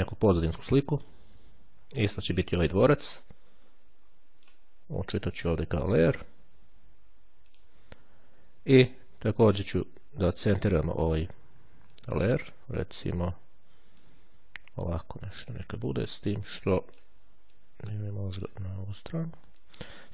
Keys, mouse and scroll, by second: 1.0 click, 2.5-4.5 drag, 7.5 click, 10.9 click, 12.1-13.8 drag, 14.2-17.6 drag, 17.7-19.1 drag, 19.8 click.